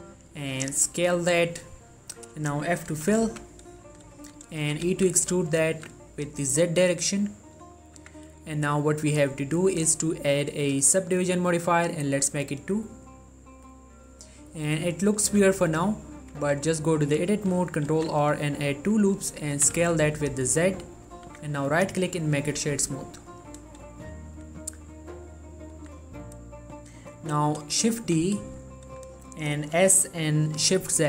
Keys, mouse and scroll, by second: 0.7 s, 1.7 click, 3.4 f, 4.0 middle click, 4.3 shift+middle click, 4.5-4.8 shift+scroll up 1, 4.8 e, 5.0 z, 5.9 z, 7.3 click, 7.7 middle click, 8.5 Tab, 9.4 click, 14.5 middle click, 14.7-15.0 scroll up 1, 15.1 shift+middle click, 16.5 Tab, 18.1 ctrl+r, 18.7-19.1 scroll up 1, 19.1 click, 19.3 right click, 19.7 s, 19.9 z, 21.1 click, 21.4 Tab, 21.8 right click, 22.2 click, 22.7 middle click, 23.2 ctrl+middle click, 24.5 scroll down 1, 24.8 middle click, 25.9 s, 26.4 right click, 28.1 shift+d, 29.1 right click, 29.9 s.